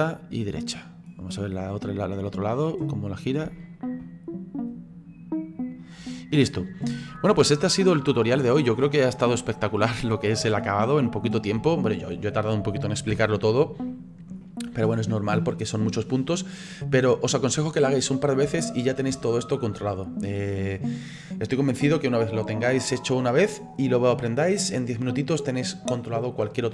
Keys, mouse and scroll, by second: 1.2 middle click, 2.0-2.5 drag, 2.5-4.7 middle drag, 4.7-6.9 drag, 7.1-8.2 middle drag, 8.2-8.6 scroll down 3, 8.6-11.3 middle drag, 11.3-11.7 scroll up 3, 11.7-13.1 shift+middle drag, 13.1 n, 13.9-15.3 shift+middle drag, 15.3-15.7 scroll down 3, 15.7-16.1 scroll up 2, 16.9-18.2 scroll down 4, 18.2 click, 18.5 space, 19.1 scroll down 1, 19.3 shift+middle click, 19.8 scroll down 1.